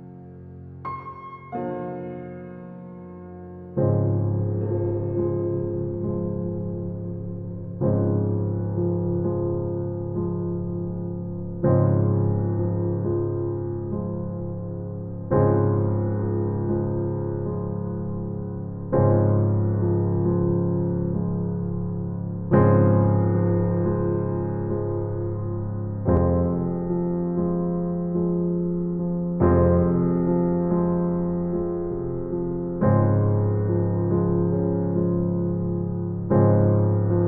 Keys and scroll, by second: 1.5 Right, 3.0 Right, 5.4 Right, 7.9 Right, 9.8 Right, 11.6 Right, 13.3 Right, 15.2 Right, 17.1 Right, 19.5 Right, 21.6 Right, 23.2 Right, 25.2 Right, 27.2 Right, 29.5 Right, 31.4 Right, 33.6 Right, 35.2 Right.